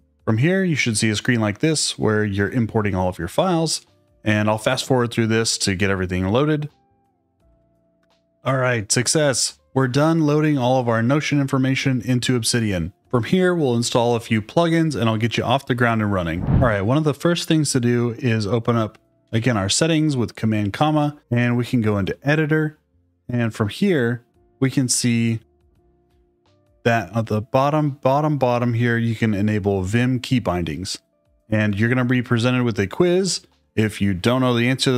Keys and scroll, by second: 19.2 super+,.